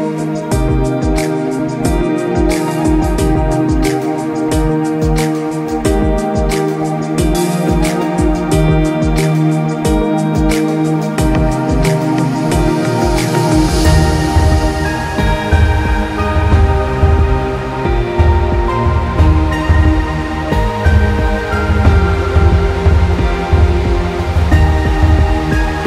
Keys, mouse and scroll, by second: 0.6 Escape, 1.0 click, 1.6 Escape, 1.8-2.4 scroll down 2, 2.0 click, 2.5 scroll up 1, 2.7 click, 3.2 alt+scroll down 2, 3.5 scroll up 1, 3.6 click, 4.2 Escape, 4.3-5.3 alt+scroll down 5, 4.6 click, 5.1 click, 5.3 s, 6.8 space, 7.1 alt+scroll up 1, 7.2 click, 7.3 space, 7.4 click, 8.7 z, 8.9 click, 9.7 click, 10.1 scroll up 1, 10.5 click, 11.8 click, 12.1 alt+scroll, 13.1 click, 13.5 scroll up 1, 13.9 click, 14.5 scroll up 1, 14.6 click, 15.2 scroll up 1, 15.4 click, 15.8 scroll down 1, 16.1 click, 16.5 alt+scroll down 1, 16.6-17.1 scroll up 2, 16.8 click, 17.1 click, 17.8 scroll down 1, 18.0 click, 18.3 alt+scroll up 1, 18.9 z, 19.0 click, 20.7 alt+scroll, 21.0 alt+scroll up 1, 21.3 click, 21.8 z, 22.9 click, 23.1-25.8 typing, 23.4 click, 23.8 click, 24.2 click, 24.7-25.2 scroll up 2, 25.2 click, 25.6 click.